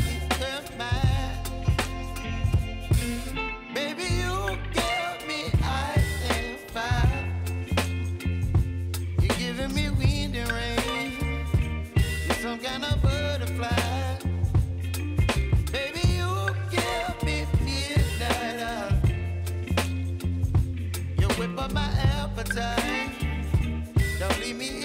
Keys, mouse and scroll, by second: 0.4-3.0 drag, 3.0-3.8 scroll down 1, 3.8 space, 4.0 click, 4.4 space, 4.8 scroll up 1, 5.8-9.1 drag, 9.1-9.9 scroll down 1, 9.9-10.7 scroll up 1, 10.7 click, 12.6 alt+scroll up 1, 14.3 click, 15.2 ctrl+d, 15.7 s, 16.4 click, 18.5 -, 18.8 Return, 19.4-20.1 scroll down 1, 20.1-21.2 scroll up 1, 21.2 click, 24.5 click.